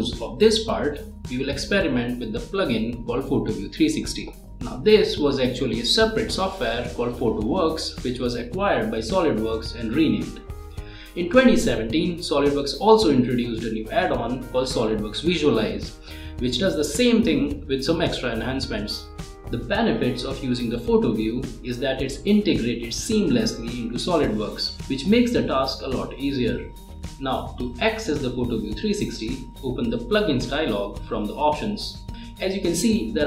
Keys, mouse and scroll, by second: 5.9 click, 10.8 click, 11.9 click, 12.8 scroll down 1, 14.1 click, 15.4 click, 18.7 click, 19.6 scroll down 1, 19.7-20.1 scroll up 1, 20.1-20.9 click, 21.2-21.8 scroll up 1, 21.8-22.6 drag, 24.6-25.3 click, 28.4 click, 31.3-33.2 drag.